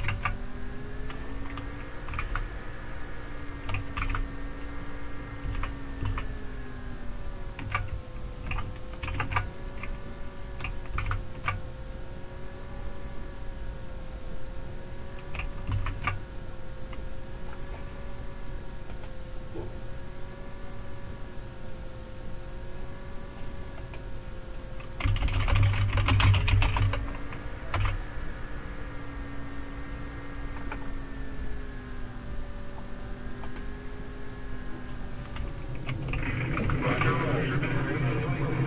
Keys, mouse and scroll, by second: 0.0 super+w, 2.2 Left, 4.0 super+Left, 5.6 super+Right, 6.0 super+Right, 9.0 super+q, 11.1 super+Left, 15.7 super+Right, 18.9 click, 23.8 click, 24.8-27.3 typing, 27.7 Return, 31.7-33.4 scroll down 1, 33.4 click, 36.7 super+Left.